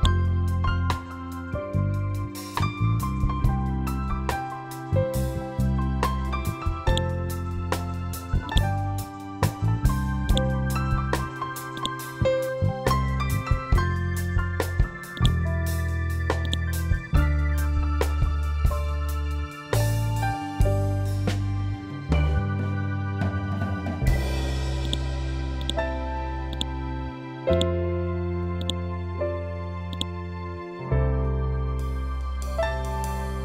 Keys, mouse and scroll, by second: 2.4 F12, 2.9 Tab, 3.8 4, 3.9 Return, 6.8 click, 10.2 right click, 15.0-20.2 drag, 24.7-33.1 drag, 33.3 click.